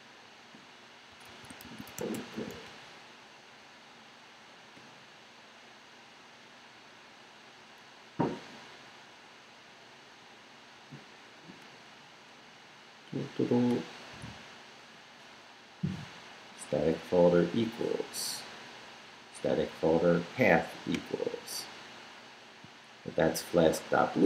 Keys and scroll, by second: 1.1 super+Return, 1.3 super+f, 1.6 super+s, 1.7-3.0 typing, 3.7 Return, 6.2 Tab, 7.6 Tab, 7.6 Return, 8.8 Return, 10.0 Return.